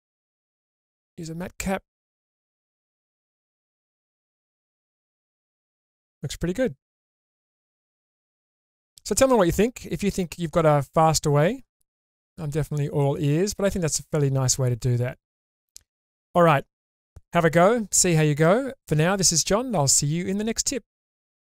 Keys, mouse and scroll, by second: 0.3-3.5 drag, 3.7-4.4 middle drag, 4.6 click, 5.0 scroll up 2, 5.3-9.4 middle drag, 9.7-10.3 shift+middle drag, 11.2-11.7 scroll down 2, 11.9 shift+space, 13.2-13.7 scroll up 2, 13.7-16.5 middle drag.